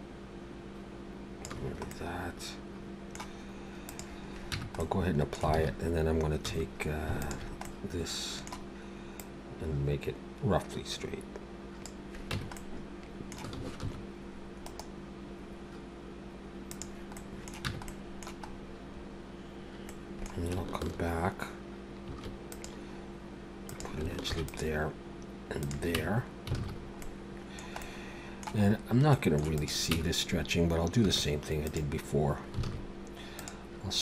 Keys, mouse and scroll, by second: 1.9 middle click, 3.9 click, 4.5 Tab, 4.8 middle click, 5.5 alt+a, 6.4 2, 7.2 alt+shift+click, 7.6 middle click, 9.2 click, 12.3 Tab, 12.5 middle click, 13.9 ctrl+2, 14.7 right click, 17.1 middle click, 17.7 Tab, 17.9 middle click, 18.5-19.6 scroll up 4, 19.9 middle click, 22.1 ctrl+r, 24.2 ctrl+r, 26.0 Tab, 26.6 alt+a, 26.7-27.1 scroll down 3, 27.0 middle click, 27.8 middle click, 28.7-29.1 scroll up 2, 29.1 middle click, 29.6 click, 30.0 Tab, 31.0 1, 31.7 click, 32.7 alt+a, 33.4 click.